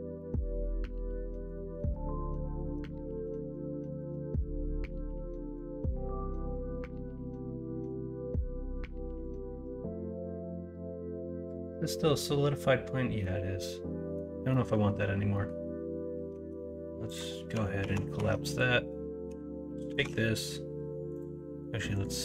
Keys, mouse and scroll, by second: 0.2 middle click, 1.5 middle click, 2.6 middle click, 13.2 middle click, 14.5 middle drag, 15.3 middle click, 16.3 Tab, 17.8 ctrl+a, 18.1 Tab, 19.2 l, 19.9 alt+z, 21.1 click.